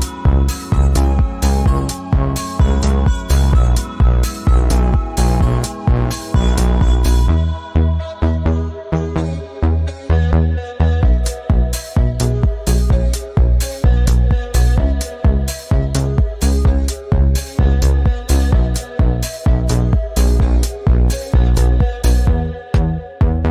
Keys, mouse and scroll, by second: 0.9 click, 2.3 space, 2.7 click, 3.7 right click, 4.4 click, 5.5 alt+scroll down 1, 5.7 space, 5.7 click, 6.0 space, 6.6-10.9 drag, 10.9-14.8 drag, 19.2 click, 19.4 ctrl+z, 20.3 click.